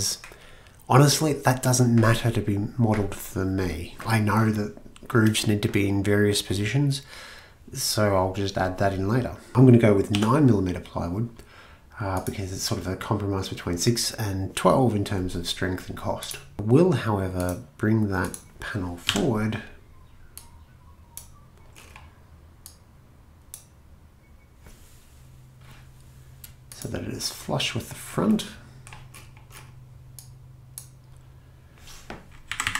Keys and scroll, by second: 9.5 e, 10.1 9, 19.0 m, 32.5 Left, 32.6 Left.